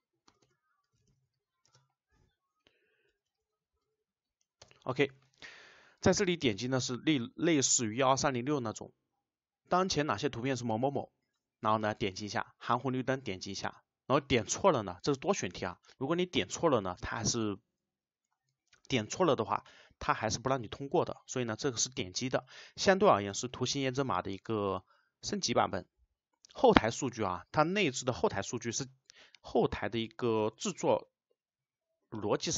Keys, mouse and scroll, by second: 0.4 BackSpace, 1.7 space, 3.3 Down, 4.7 Return.